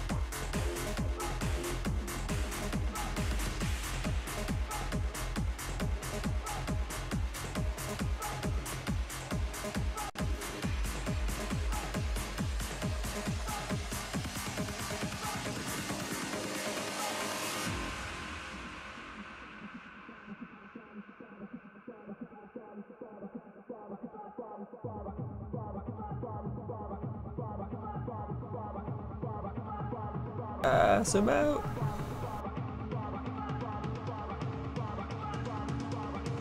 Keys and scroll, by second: 11.2 s, 25.2 s, 32.9 s.